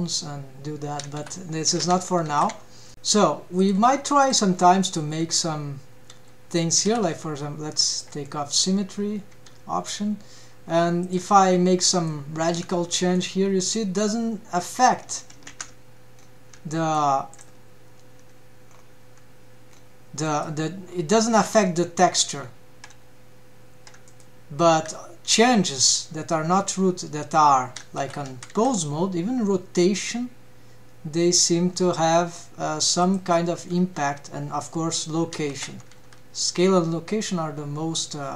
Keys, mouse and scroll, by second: 1.8 a, 2.0 alt+q, 2.3 alt+q, 2.4 alt+q, 3.5 Tab, 3.5 click, 4.2 click, 4.5-5.1 scroll down 2, 5.3 g, 8.0 click, 9.3 g, 11.8 middle click, 12.6 Tab, 12.9-13.2 middle drag, 13.3 scroll up 2, 13.7-14.1 middle drag, 15.1 scroll down 1, 15.6 ctrl+Tab, 16.1-16.7 scroll down 2, 16.7 shift+middle click, 17.3 click, 18.6 scroll up 2, 19.7 scroll down 1, 20.3 middle click, 20.8 scroll up 2, 22.3-22.7 scroll down 2, 24.0 middle click, 24.8 s, 28.5 r, 33.8 g, 35.9 s.